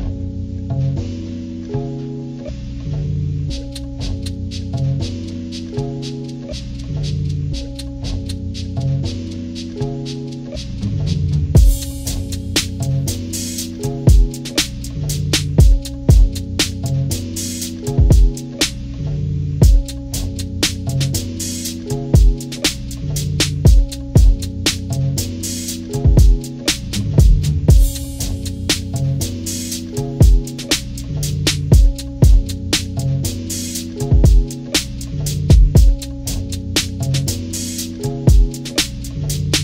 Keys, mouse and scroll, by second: 0.5 click, 1.2 ctrl+=, 1.9 click, 2.7-5.7 drag, 7.2 click, 11.7 click, 13.0 click, 14.1 click, 15.3 click, 16.2 ctrl+-, 17.0 ctrl+scroll down 2, 17.3 ctrl+=, 17.5 ctrl+=, 17.8 ctrl+=, 18.4 ctrl+=, 18.6-19.3 scroll up 6, 20.5 click, 23.1 shift+click, 25.0 shift+click, 26.1 shift+click, 27.5 shift+click, 29.0 click, 31.1 ctrl+-, 31.5 ctrl+-, 31.5 ctrl+scroll down 2, 31.9 ctrl+-, 32.4 scroll down 2, 33.2 ctrl+=, 33.3 ctrl+=, 34.3 scroll up 2, 35.7-36.1 scroll up 4, 36.6 ctrl+=, 36.8 ctrl+=, 37.0 ctrl+scroll down 2, 38.7 click.